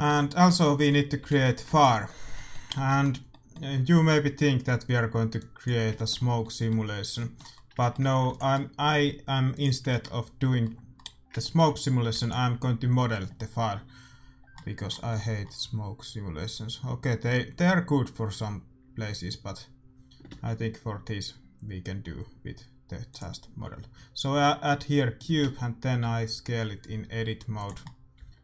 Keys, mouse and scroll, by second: 1.1 a, 1.3 a, 1.6 ctrl+s, 3.0-5.1 middle drag, 5.3-7.1 drag, 5.9-12.0 middle drag, 8.2 ctrl+s, 9.5-11.4 drag, 12.0 ctrl+s, 15.3-18.0 middle drag, 19.7 middle click, 20.2 shift+a, 23.5 middle click, 24.2-26.0 middle drag, 25.3 Tab, 26.0 s, 27.7-28.4 middle drag, 28.1 s.